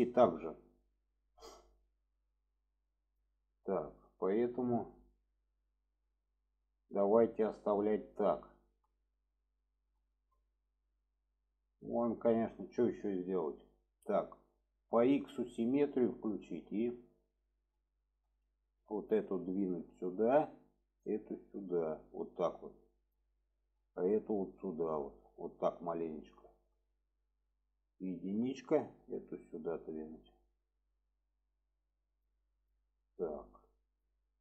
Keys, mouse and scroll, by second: 3.6-4.3 middle drag, 4.6-5.1 middle drag, 5.3 shift+middle drag, 6.4-7.0 middle drag, 7.5-8.2 middle drag, 8.4 shift+middle drag, 9.1-9.8 middle drag, 10.0 shift+middle drag, 10.5-10.9 middle drag, 11.2 shift+middle click, 12.0 middle click, 12.7 middle click, 15.2 click, 15.7 shift+middle click, 16.5 shift+middle click, 18.3 click, 19.2-20.3 drag, 20.9 click, 21.7 click, 23.4 shift+middle click, 24.2 click, 24.9 click, 26.8 middle click, 28.7-30.2 drag, 31.7 click, 32.6 click, 33.9 click.